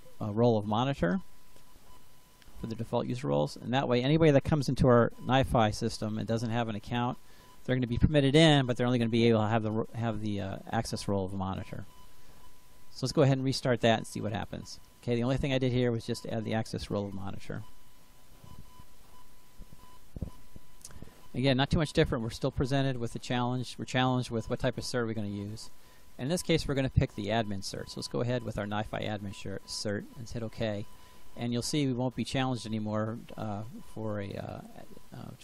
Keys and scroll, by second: 4.9 ctrl+v.